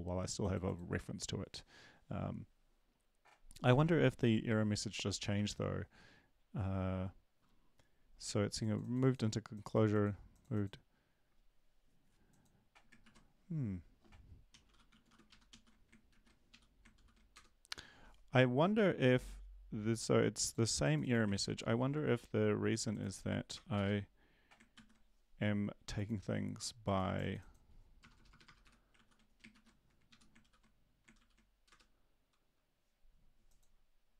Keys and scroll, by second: 5.3 Right, 5.3 ctrl+`, 13.0 ctrl+`, 14.3-16.5 typing, 16.1 ctrl+`, 16.5 Up, 16.9 ctrl+l, 17.3 Return, 21.3 ctrl+`, 24.7 ctrl+s, 28.1 BackSpace, 28.3 BackSpace, 28.6 Delete, 28.6 BackSpace, 28.9 ctrl+s, 29.5 ctrl+`, 30.1 Up, 30.4 ctrl+;, 31.2 ctrl+l, 31.7 Return.